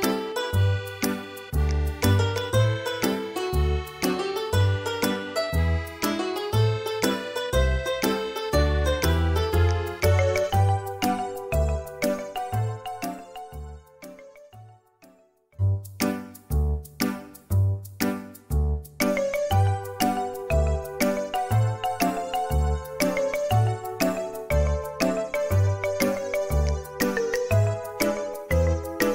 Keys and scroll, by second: 1.7 ctrl+z, 3.7 Return, 3.7 typing, 3.9 Delete, 10.4 Caps_Lock, 17.0 Caps_Lock, 18.8 space, 22.8 Escape, 26.7-27.1 typing, 28.5-29.1 typing.